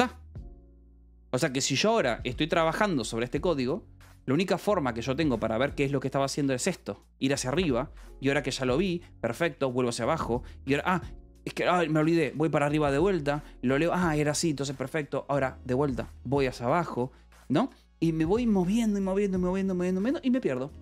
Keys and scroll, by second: 2.4-3.9 typing, 6.2 g, 6.8 d, 9.8 ctrl+o, 11.6 h, 12.1 g, 12.7 d, 13.4 j, 16.5 ctrl+o, 17.5 shift+o, 17.5 Escape, 17.8 u, 20.7 ctrl+o.